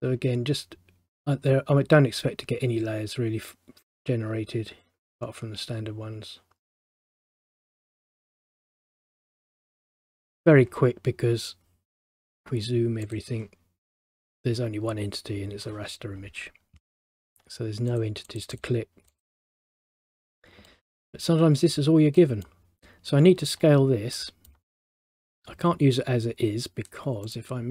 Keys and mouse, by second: 8.1 click, 12.3 click, 18.0 click, 18.4 click, 18.6 click, 20.0 middle click, 20.8 middle click, 22.3 middle click, 24.3 middle click, 27.4 click.